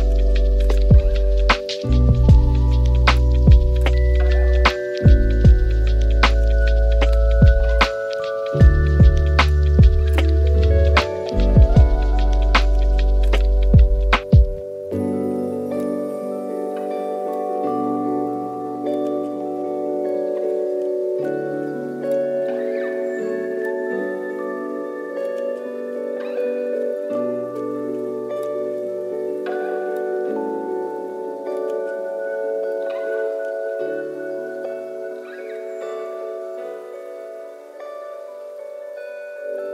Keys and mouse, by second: 0.0 z, 2.0 click, 2.3 click, 2.8-3.5 drag, 4.4-6.2 drag, 5.3 KP_0, 6.6-7.1 drag, 8.5 click, 9.6 click, 10.5 click, 11.9 click, 12.3-14.9 drag, 15.2 click, 16.6 click, 17.7-21.1 drag, 19.4 KP_0, 20.0 BackSpace, 20.6 KP_0, 21.5-22.6 drag, 23.0 click, 25.1 click, 25.4 click, 25.6 click, 28.8 click, 30.9 click, 32.0-33.9 drag, 34.6-35.3 drag, 36.7 click, 39.2 a, 39.2 =.